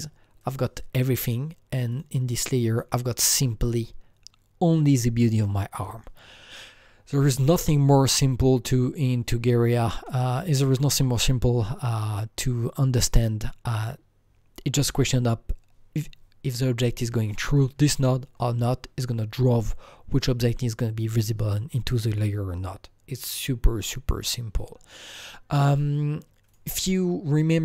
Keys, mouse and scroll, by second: 0.9-1.9 scroll down 1, 1.9 click, 2.7 click, 2.7 scroll down 1, 7.4 click, 9.9 click, 10.0-13.0 alt+middle drag, 17.6-20.5 drag, 17.6-20.5 alt+middle drag, 26.5-27.6 drag, 26.5-27.6 alt+middle drag, 27.5 click.